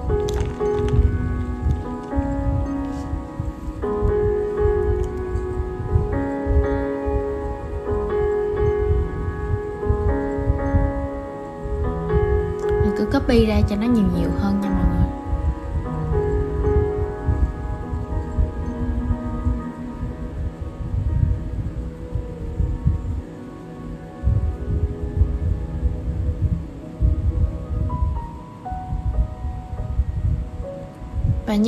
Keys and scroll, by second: 5.1 super+z, 15.4 super+c, 20.5 super+v, 22.4 super+z.